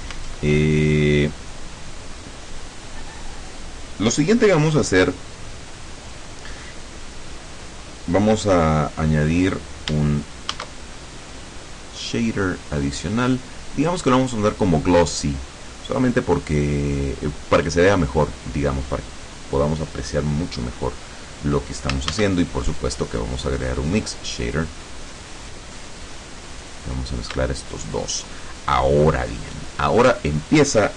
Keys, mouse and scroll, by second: 10.6 shift+a, 16.5 click, 17.7 click, 22.2 shift+a, 23.4 click, 24.6 click, 26.0-27.1 drag, 27.6-30.0 shift+drag.